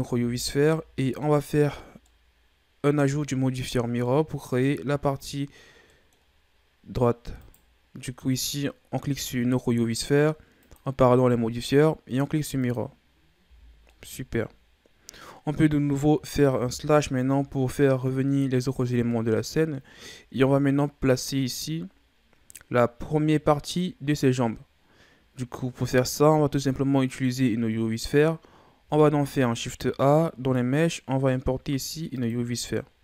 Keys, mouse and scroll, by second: 0.1 a, 0.5 scroll down 2, 0.7-3.6 middle drag, 3.6-4.0 ctrl+scroll down 1, 4.0-6.6 middle drag, 6.6-7.0 scroll up 1, 7.4 right click, 10.6-13.4 drag, 13.4 a, 13.7 scroll down 2, 13.9-16.6 middle drag, 16.6 KP_Divide, 19.9-20.5 scroll down 2, 20.5-23.0 scroll up 4, 23.0-24.6 scroll up 1, 28.8 shift+a.